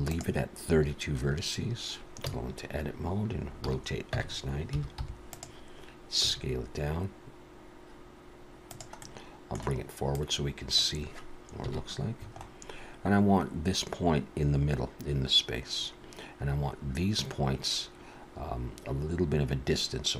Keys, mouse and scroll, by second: 0.0 click, 1.5-1.9 scroll down 2, 2.2 Tab, 3.6 r, 6.2 s, 9.0 middle click, 10.2 click, 11.6 KP_1, 12.3-12.9 scroll up 3, 12.9 scroll up 2.